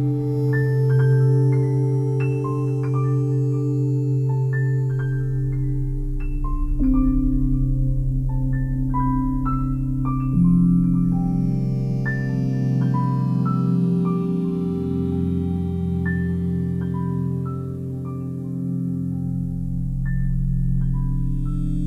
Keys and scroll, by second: 2.5 p, 9.8 ctrl+z, 12.0 a, 20.5 s.